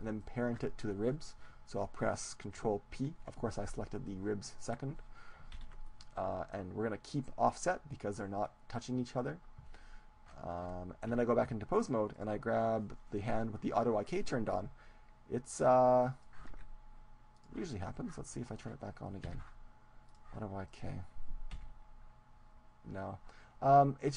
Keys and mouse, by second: 2.0 right click, 5.6 ctrl+p, 10.2-12.2 middle drag, 11.1 Tab, 12.2-14.2 right drag, 16.0 g, 16.4-19.6 drag, 16.6 ctrl+z, 19.6 a, 20.6-22.6 drag, 20.8-22.6 right drag, 22.6 g.